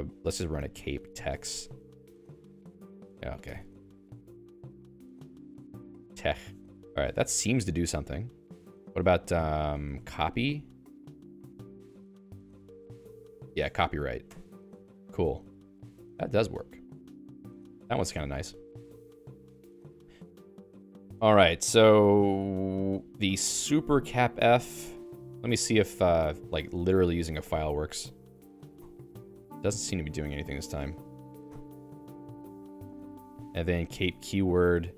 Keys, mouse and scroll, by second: 0.3 alt+x, 0.5-4.8 typing, 3.4 Escape, 4.8 alt+x, 5.5 Return, 6.8 Down, 7.1-8.5 Down, 9.7-10.8 typing, 12.1 alt+x, 13.0 Return, 13.8 Down, 14.3 Return, 16.0 BackSpace, 17.0 BackSpace, 17.8 BackSpace, 18.0 Escape, 23.4 j, 24.4 Escape, 24.6-27.6 typing, 25.0 Escape, 28.8 ctrl+alt+i, 30.8 BackSpace, 31.5 ctrl+alt+i, 32.7 BackSpace, 33.0 BackSpace, 33.2 BackSpace, 33.6 Return.